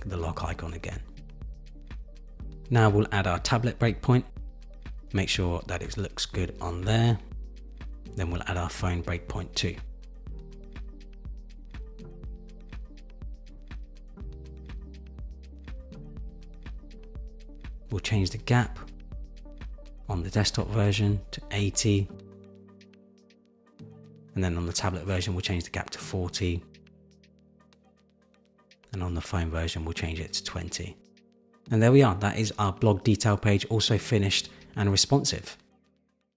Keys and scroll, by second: 1.3 super+=, 5.5 super+-, 18.2 shift+Down, 19.9 super+z, 20.6 super+z, 24.1 shift+Down, 24.7 shift+Down, 25.3 shift+Down, 30.5 Return, 31.7 super+-.